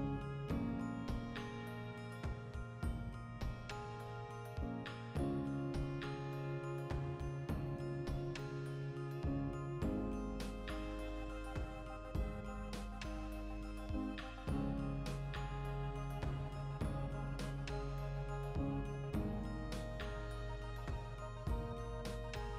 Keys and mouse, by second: 2.4-13.1 ctrl+middle drag, 3.2 ctrl+r, 3.8 click, 4.3 ctrl+r, 4.7 click, 12.8 3, 13.1 alt+right click, 13.2-18.8 ctrl+middle drag, 15.3 ctrl+KP_Add, 17.1 ctrl+z, 18.0 shift+d, 18.8 click.